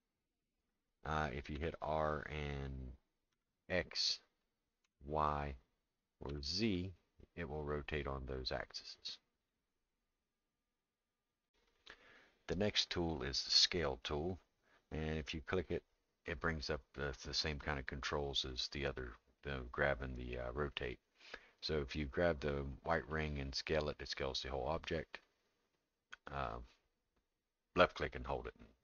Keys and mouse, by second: 1.5 r, 14.0 click, 23.1-28.8 drag.